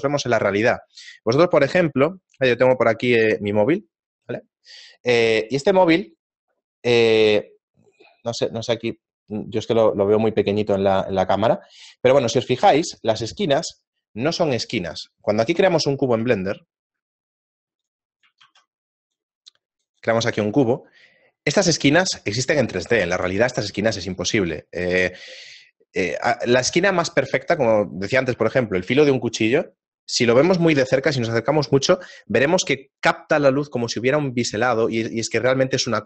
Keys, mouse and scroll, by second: 20.5 middle click, 20.9-21.2 scroll down 1, 21.2 scroll up 1.